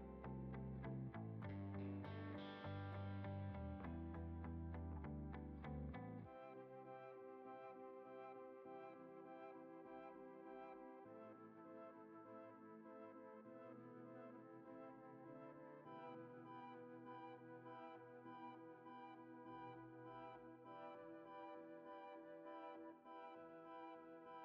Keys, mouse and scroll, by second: 2.8 g, 4.1 z, 6.5 click, 8.3 click, 10.1 shift+a, 15.8 s, 20.0 click.